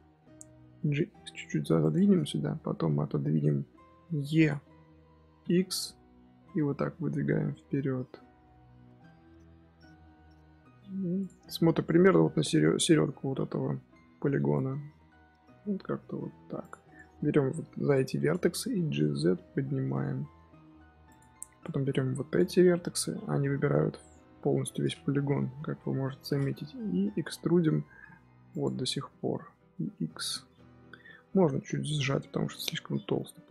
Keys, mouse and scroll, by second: 0.2 g, 2.9-4.3 scroll down 4, 4.3 e, 14.2 g, 16.9 click, 18.7 g, 21.5 click, 22.9 middle click, 23.4 z, 25.1 KP_3, 25.7 KP_1, 26.2-26.7 scroll up 3, 26.7-27.8 scroll down 2, 27.8 e, 29.6 scroll down 3, 29.8-31.0 middle drag, 31.0 a, 31.2-33.5 middle drag.